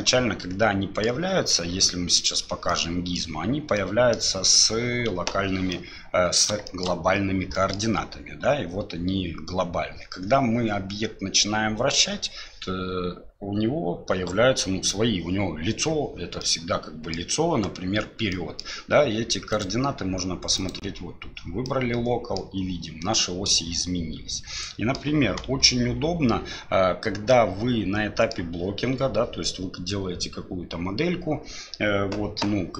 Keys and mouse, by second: 2.2 click, 2.7 click, 3.7 click, 5.1 KP_7, 5.7 click, 6.6 shift+click, 7.5 middle click, 16.4 middle click, 18.3 middle click, 19.6-21.4 drag, 21.6 middle click, 23.5-24.9 middle drag, 25.6 KP_1, 27.3-28.3 middle drag.